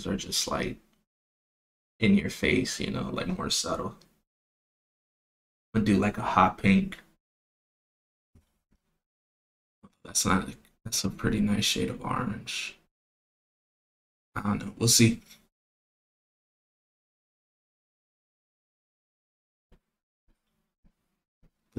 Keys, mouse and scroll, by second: 0.3 click, 6.0 click, 7.9 g, 10.8 shift+d, 16.0 click, 18.2 click, 19.2 click.